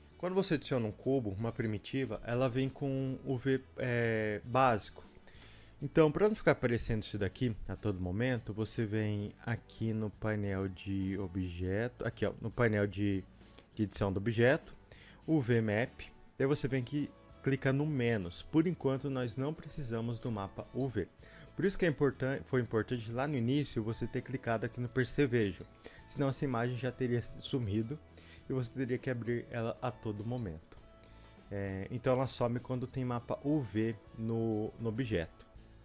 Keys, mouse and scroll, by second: 18.1 click, 19.2-21.3 middle drag, 21.3 click, 31.2-33.2 shift+middle drag, 33.2 click, 33.8 middle click, 34.5 shift+click, 34.8 middle click, 35.0 s, 35.7 click.